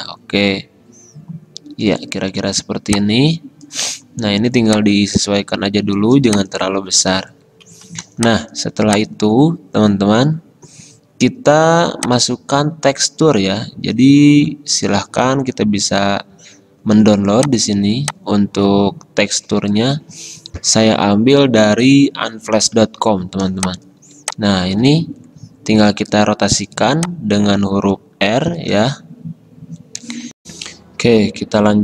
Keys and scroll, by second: 30.4 alt+Tab.